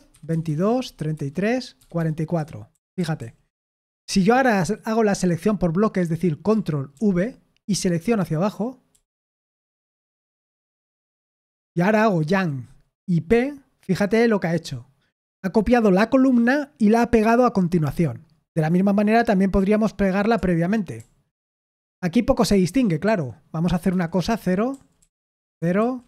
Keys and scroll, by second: 0.0-4.6 typing, 2.3 Escape, 6.9 ctrl+v, 8.9-10.5 typing, 12.2 y, 13.2 typing, 20.9 shift+p, 23.0-26.0 typing, 24.4 Escape.